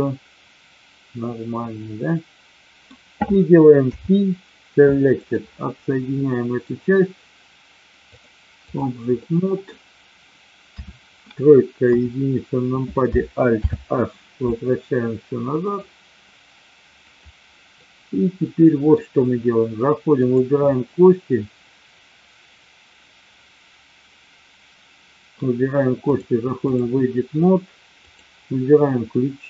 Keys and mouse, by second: 3.8 p, 6.2 middle click, 8.2-8.8 drag, 9.2-9.6 middle drag, 10.6 KP_3, 11.8 KP_1, 13.5 alt+h, 15.6 click, 17.8-18.9 middle drag, 20.2 click, 26.0-26.9 drag, 28.0 click.